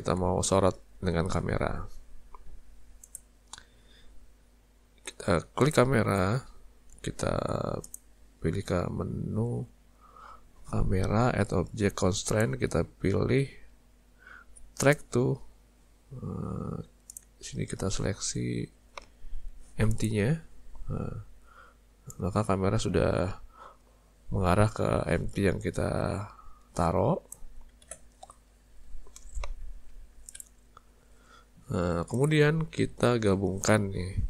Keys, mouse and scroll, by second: 0.8-2.4 scroll down 1, 2.5 z, 5.6 click, 7.9 click, 12.3 click, 17.1 click, 22.1 click, 27.8 ctrl+z, 29.6 z, 31.6 z.